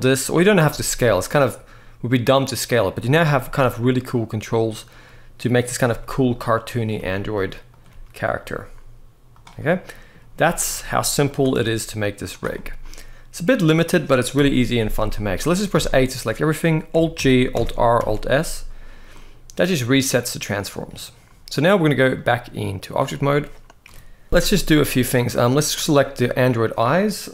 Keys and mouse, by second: 0.4 g, 2.7 click, 2.9 r, 5.3 click, 5.6 g, 6.0 click, 7.6 g, 9.0 click, 9.4-9.8 middle drag, 10.1-10.4 middle drag, 11.0 click, 11.0 g, 11.3 r, 12.0 drag, 12.3-13.2 middle drag, 14.1 KP_1, 14.9 shift+middle drag, 15.5 a, 16.9 alt+g, 17.3 alt+r, 17.7 alt+s, 18.8-19.5 middle drag, 19.8-20.3 middle drag, 21.8-22.6 drag, 23.5 KP_1, 24.2 alt+a, 24.6-24.9 middle drag.